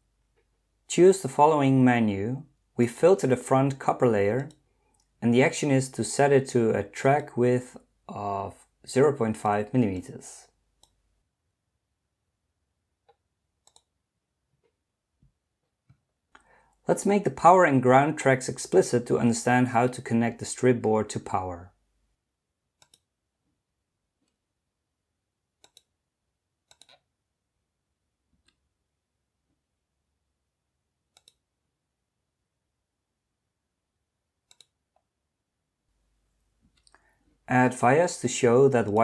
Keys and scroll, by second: 21.1 Escape, 28.4 Escape, 36.7 Escape.